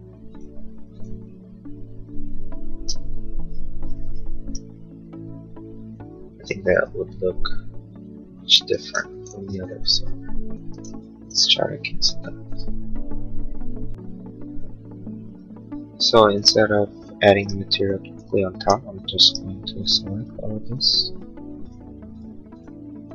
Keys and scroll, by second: 2.7 space, 3.0 Escape, 9.0 ctrl+z, 18.3 space.